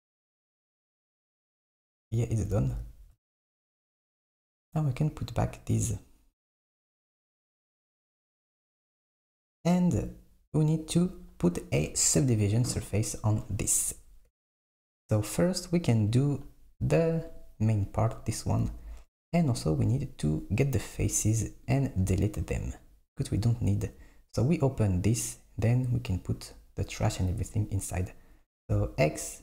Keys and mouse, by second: 1.4 Tab, 2.7 super+s, 4.3 click, 10.7 click, 16.1 click, 17.3 click, 18.1 click, 18.6 Tab, 19.4 click, 21.6 shift+click, 28.7 x.